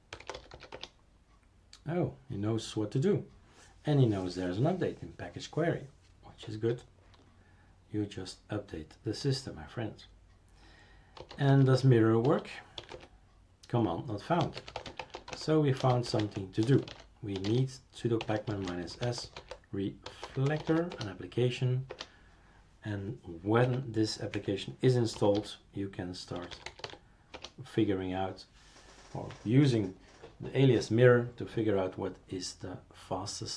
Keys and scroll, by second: 0.0-1.2 typing, 10.9-21.2 typing, 21.9 Return, 23.6 Up, 24.3 Down, 24.9-27.3 typing.